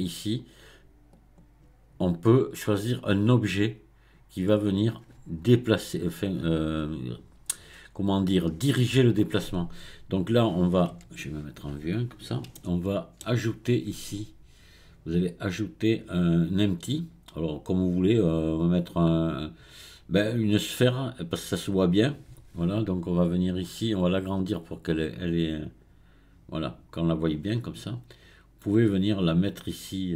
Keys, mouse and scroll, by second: 3.3-4.7 drag, 12.6-15.2 shift+middle drag, 15.2-18.3 drag, 23.6 click, 25.0-28.0 drag, 29.0-30.1 drag.